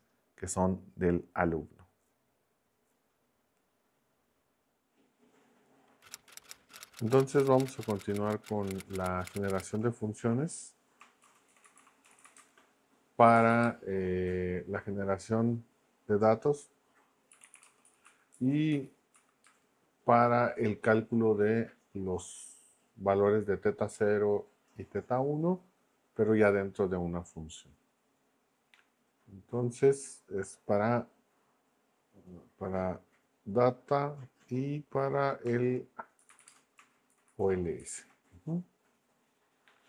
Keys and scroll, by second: 17.1-19.4 typing, 36.0-37.8 typing.